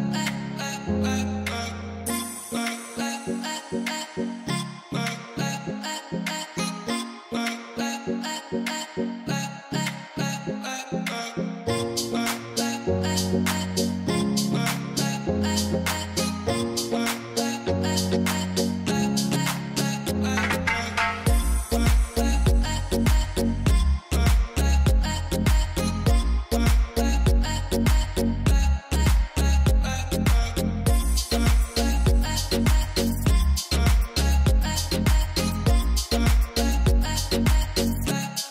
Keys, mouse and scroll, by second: 1.0 click, 12.0-14.0 drag, 15.0 click, 27.7-36.1 middle drag.